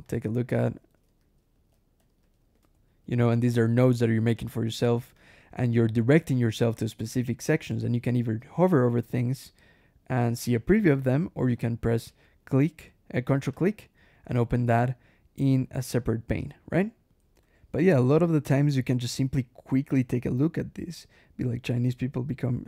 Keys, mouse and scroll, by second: 0.0-3.6 typing, 5.0 click, 13.4 ctrl+click, 16.2 click, 17.3 \, 18.1 ctrl+w, 21.5 click.